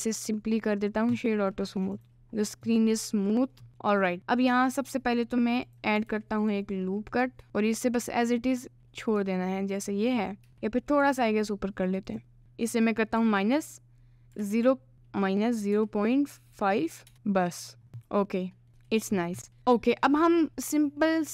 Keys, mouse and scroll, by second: 1.7 middle click, 3.4 middle click, 3.7 Tab, 3.8 middle click, 5.7 click, 6.1 ctrl+r, 7.8 click, 9.2 Tab, 10.5 Tab, 11.0 g, 12.8 click, 14.9 BackSpace, 17.8 click, 18.1 click, 18.4 middle click, 18.8 Tab, 19.5-20.5 middle drag, 19.6 ctrl+s, 20.8 middle click.